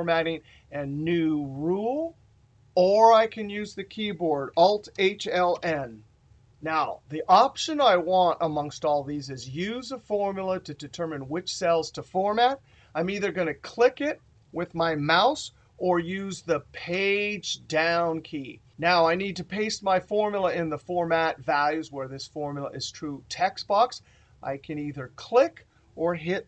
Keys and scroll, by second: 4.2 alt+n, 15.9 Down, 25.8 Tab.